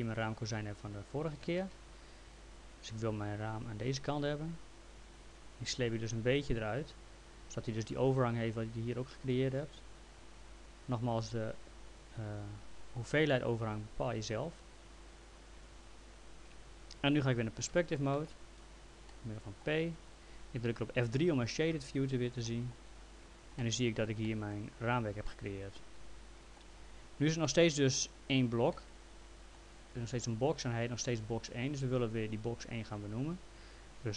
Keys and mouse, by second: 0.0 click, 1.3-2.1 typing, 2.9 click, 10.8 click, 14.7 click, 17.7 p, 18.1 middle click, 19.1 alt+middle click, 21.7 F3, 22.4 middle click, 23.6 alt+middle click, 25.2 alt+middle click, 27.5 alt+middle click, 31.8 click.